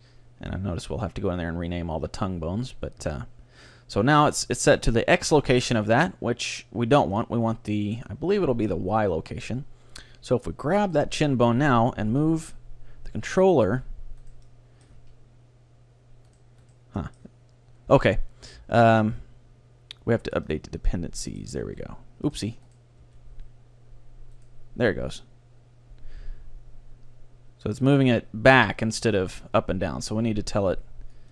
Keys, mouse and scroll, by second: 3.7 middle click, 4.8 middle click, 5.0 middle click, 7.1-8.8 drag, 10.9-12.7 right drag, 12.1 g, 14.5-16.4 middle drag, 14.5-17.3 right drag, 15.0 g, 17.0 middle click, 17.4 middle click, 17.4 right click, 17.6-20.4 middle drag, 17.6-18.6 right drag, 20.4-22.2 drag, 21.2 middle click, 21.7 g, 22.1 middle click, 22.8-24.5 right drag, 23.1 g, 25.0 g, 28.9-31.3 right drag, 30.4-31.3 middle drag, 31.2-31.3 drag.